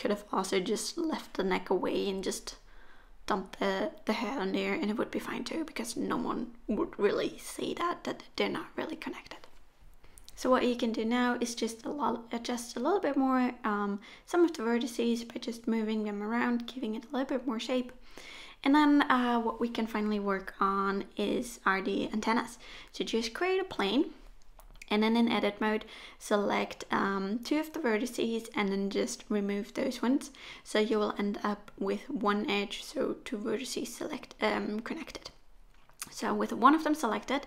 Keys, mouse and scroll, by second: 0.4 1, 0.6 middle click, 1.8 click, 1.9 middle click, 2.5 shift+click, 2.7 middle click, 3.8 o, 4.4 g, 6.6 middle click, 7.0 scroll down 1, 7.2 shift+middle click, 7.4 middle click, 8.1 click, 8.3 middle click, 8.8 shift+click, 9.0 middle click, 9.5 s, 11.1 middle click, 11.3 shift+middle click, 11.5 middle click, 11.9 click, 12.0 middle click, 12.4 shift+click, 12.6 middle click, 13.2 s, 15.6 g, 16.4 middle click, 16.7 scroll down 4, 16.9 middle click, 17.9 middle click, 19.1 middle click, 19.7 3, 19.9 scroll up 1, 20.0 middle click.